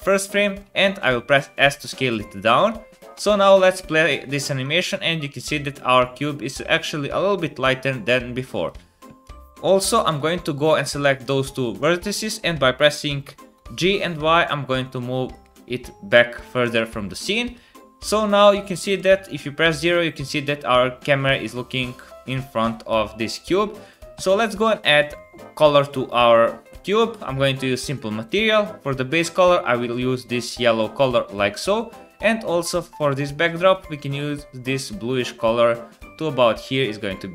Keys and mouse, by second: 0.6 s, 3.1 space, 8.4 space, 8.6 click, 9.2 Tab, 10.1-15.4 shift+drag, 11.8 KP_7, 13.6 g, 15.8 Tab, 18.8 KP_0, 23.8 click, 23.8 middle click, 23.8 right click, 24.9 click, 24.9 middle click, 24.9 right click, 28.3 click, 28.3 middle click, 28.3 right click, 33.1-34.1 drag, 33.1-34.1 middle drag, 33.1-34.1 right drag.